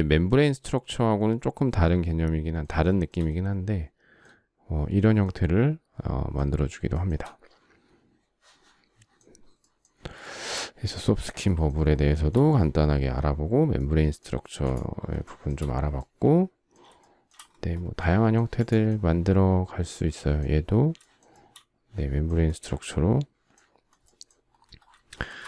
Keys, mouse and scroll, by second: 2.5 shift+middle click, 6.5 shift+middle click, 9.8 shift+middle click, 11.7 shift+middle click, 13.9 space, 14.9 shift+middle click, 16.6 shift+middle click, 20.6 shift+middle click, 24.7 shift+middle click.